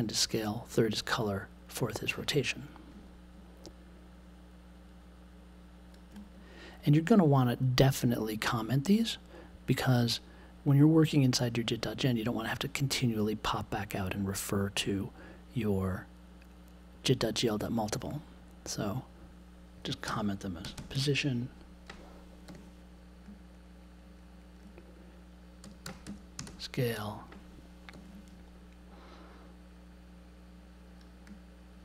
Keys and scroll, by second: 20.0 c, 22.4 super+j, 25.3-26.9 typing, 27.9 super+j.